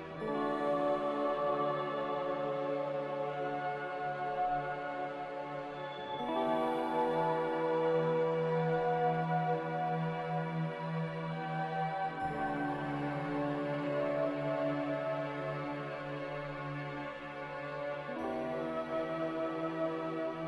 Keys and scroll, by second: 0.0-0.9 typing, 6.4-7.8 typing, 9.1-9.8 typing, 11.2-11.9 typing.